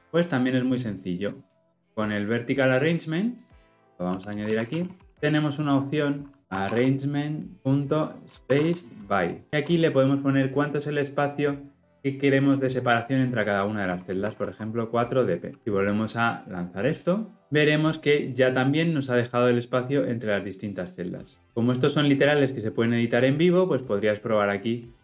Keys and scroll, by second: 5.1 Return, 9.5 Return, 21.4 ctrl+z.